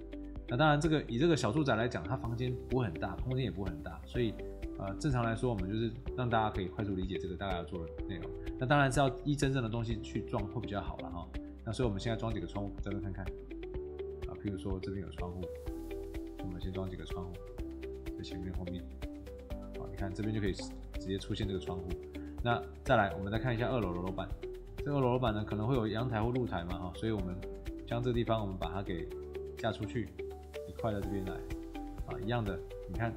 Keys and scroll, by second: 5.3 Escape, 19.1 Escape, 30.6 Escape.